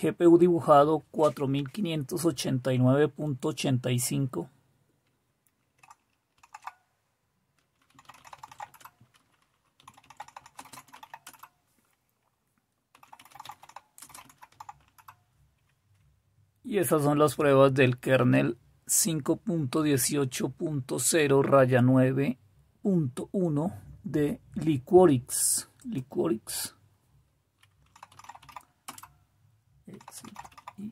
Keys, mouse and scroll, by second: 6.3 super+q, 15.1 typing, 28.3-30.9 typing.